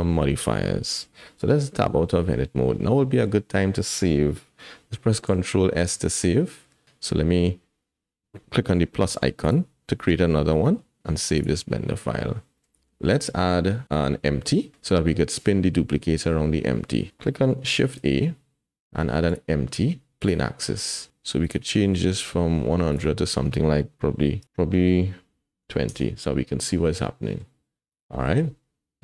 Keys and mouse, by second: 1.7 Tab, 2.7 click, 5.4 ctrl+s, 17.9 shift+a, 21.4 click, 23.1-25.9 drag, 27.2 drag, 27.2 middle drag, 27.9 click.